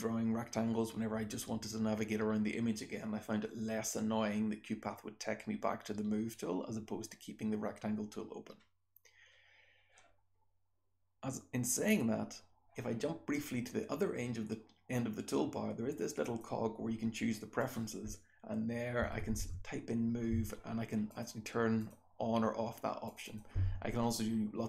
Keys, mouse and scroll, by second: 16.2 click, 16.2 scroll down 1.